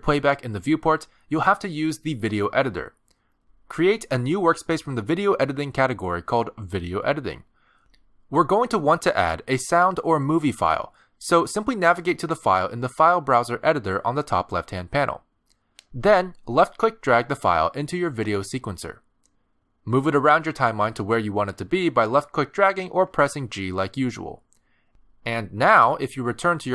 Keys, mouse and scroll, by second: 0.5 click, 1.4 middle click, 2.2 space, 3.7 click.